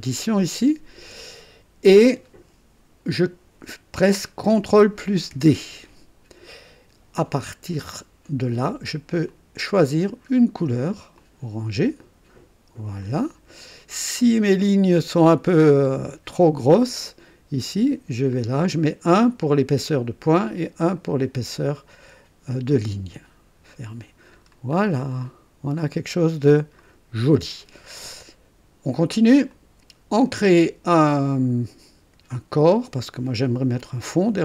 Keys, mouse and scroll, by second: 0.2 ctrl+click, 5.3 ctrl+d, 9.2 click, 11.1 click, 13.0 click, 14.6 click, 15.6 scroll up 1, 17.8 scroll down 1, 20.5 scroll down 1, 23.6 click, 24.5 scroll down 1, 25.1-26.9 drag, 27.2 scroll up 1, 29.4 click.